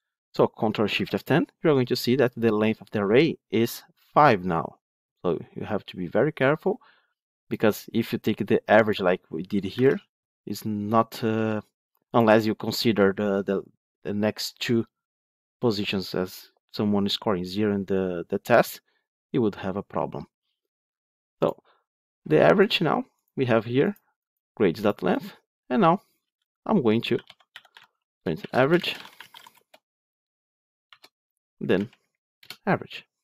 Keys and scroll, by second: 0.9 ctrl+shift+F10, 9.7 ctrl+/, 27.7 Tab, 32.3 Return.